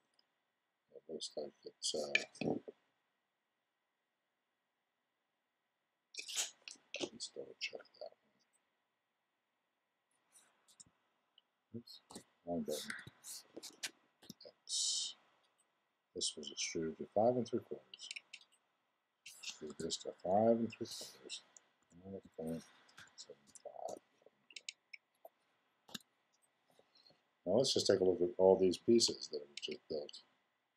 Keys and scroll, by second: 10.7 z, 14.2 x, 19.6 super+e, 21.8 5, 25.8 x, 28.9 1.